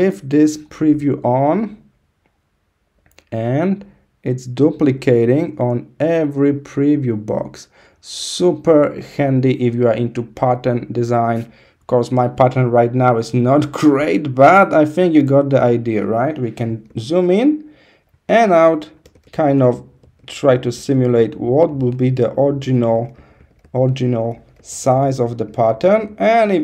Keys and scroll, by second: 16.8 super+-, 18.2 super+=, 18.9 super+-, 19.5 super+-, 20.1 super+-, 20.8 super+-, 21.7 super+-, 24.5 super+=, 24.6 super+-, 25.2 super+=.